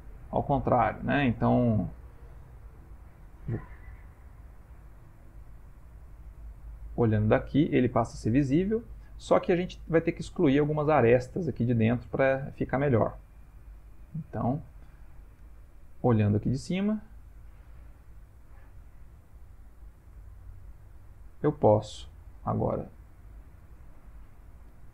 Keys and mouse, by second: 0.0 ctrl+middle click, 0.4 ctrl+middle click, 1.2 shift+middle click, 2.0 shift+middle click, 4.0 alt+right click, 4.7 alt+middle click, 5.5 middle click, 7.2 ctrl+middle click, 11.6 middle click, 12.6 ctrl+middle click, 12.7 ctrl+middle click, 12.7 ctrl+middle click, 13.0 middle click, 13.2 ctrl+middle click, 13.7 shift+middle click, 13.8 ctrl+middle click, 14.5 ctrl+middle click, 14.6 ctrl+middle click, 15.4 middle click, 17.1 click, 17.9-20.1 shift+middle click, 18.9 ctrl+middle click, 19.0 ctrl+middle click, 19.6 ctrl+middle click, 20.2 shift+middle click, 21.2 Tab, 21.8 ctrl+middle click, 22.6 shift+middle click, 24.6 alt+click.